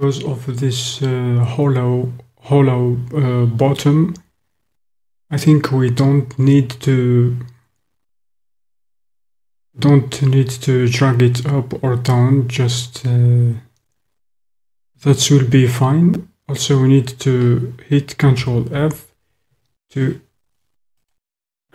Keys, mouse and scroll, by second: 18.3 ctrl+f.